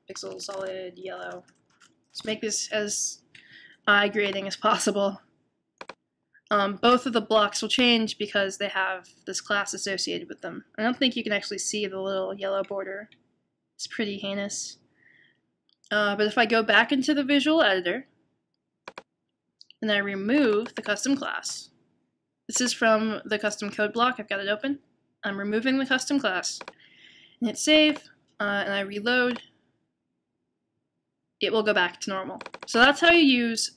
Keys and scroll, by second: 0.0-2.3 typing, 3.6 typing.